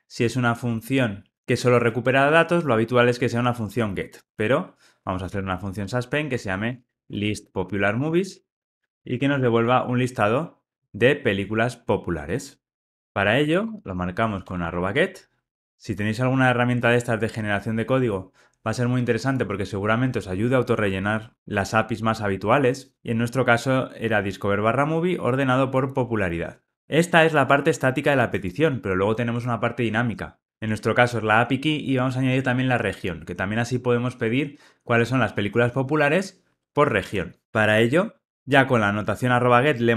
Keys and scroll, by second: 6.3 Tab, 15.5 Return, 22.9 Tab.